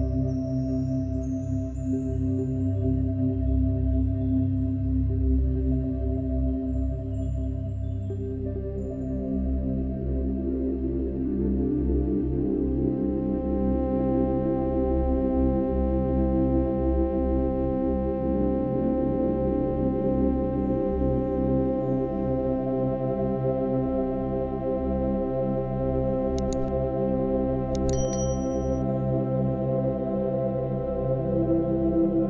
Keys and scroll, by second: 1.1 [, 6.9 space, 10.9 space, 26.4 space.